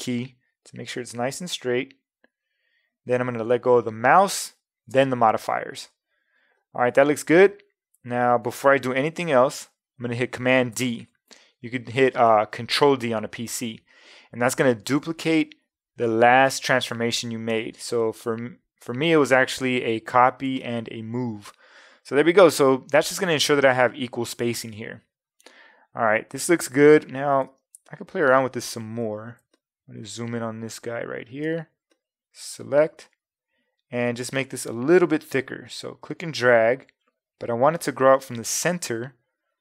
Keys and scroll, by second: 10.7 super+d, 18.2 super+-, 19.0 super+-, 20.5 super+space, 27.5 space.